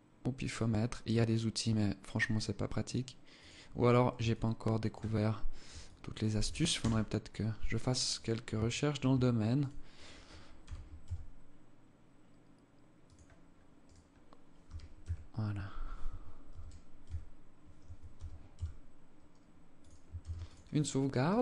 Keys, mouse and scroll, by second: 3.7 alt+click, 4.4-4.8 scroll down 7, 5.2 alt+click, 6.2 KP_0, 6.8 scroll up 2, 7.5 right click, 8.1 shift+right click, 9.0 right click, 9.4 right click, 10.0 g, 13.2 right click, 14.0 g, 15.9 g, 17.5 g, 19.6 ctrl+s.